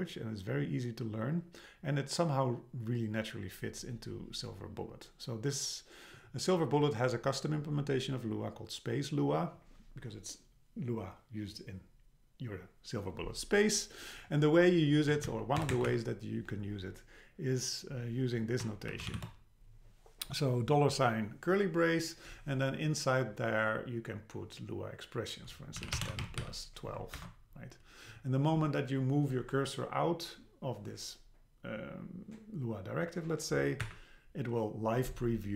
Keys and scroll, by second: 15.1 Down, 15.6 Return, 15.9 Up, 27.2 super+Left, 33.8 Up.